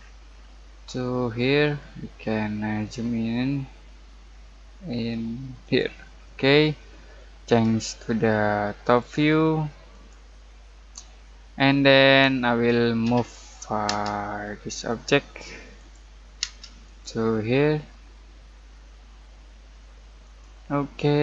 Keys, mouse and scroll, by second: 2.3 middle click, 2.6 typing, 2.7 scroll up 1, 5.6 click, 6.2-8.8 middle drag, 7.5 typing, 8.8 click, 8.8 typing, 11.0-11.3 scroll down 1, 11.3 middle click, 11.8-13.0 scroll up 1, 13.0 m, 13.8 space, 14.8 click, 16.4 space, 16.8 click, 20.2 click, 21.1 middle click.